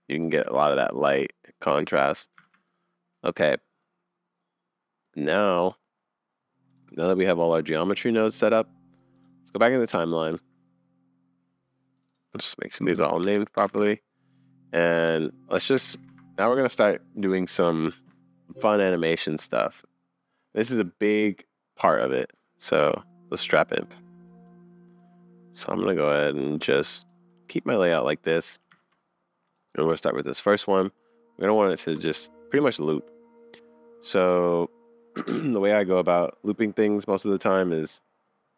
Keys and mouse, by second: 0.3 r, 2.4 super+s, 2.8 click, 3.8-5.1 drag, 6.9-7.9 drag, 12.9 BackSpace, 13.1 BackSpace, 13.6 BackSpace, 15.0-16.1 drag, 15.9 0, 22.8 n, 24.3 click, 25.0 click, 25.5 middle click, 26.6-27.1 middle drag, 27.1 click, 27.3-27.6 middle drag, 27.9-28.6 middle drag, 28.8 super+s, 29.5 middle click, 32.0 Left, 36.1-37.4 middle drag, 38.0-38.5 middle drag.